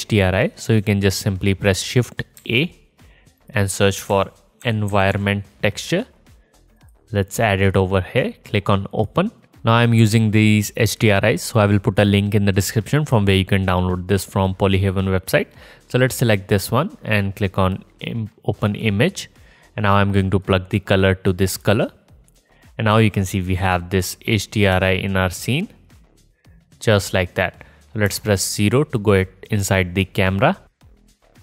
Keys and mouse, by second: 0.7 click, 3.1 shift+a, 7.1 click, 7.3 click, 8.7-9.4 drag, 20.9-24.5 drag, 26.5 alt+click, 26.6 alt+middle click, 26.7 alt+click, 26.7 alt+middle click, 26.8 alt+click, 27.1 alt+middle click, 27.4 alt+middle click, 27.5 alt+drag, 27.7 middle drag, 28.8 KP_0.